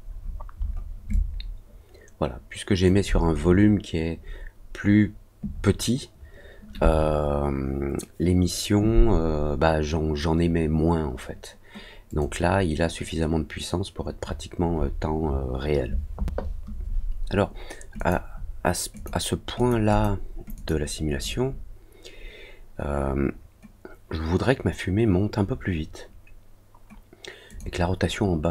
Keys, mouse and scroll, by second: 1.1-2.8 alt+drag, 12.0 click, 17.9 click, 18.9 click, 19.5 click, 19.8 click, 20.5 click, 27.4 click.